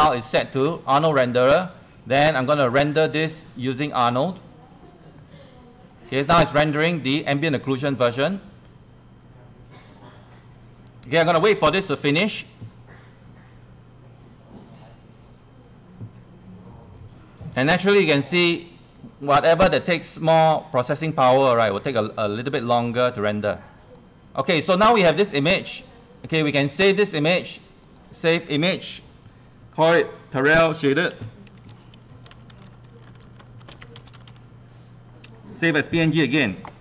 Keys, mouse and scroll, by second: 31.2-34.9 typing, 36.0 click, 36.6 typing.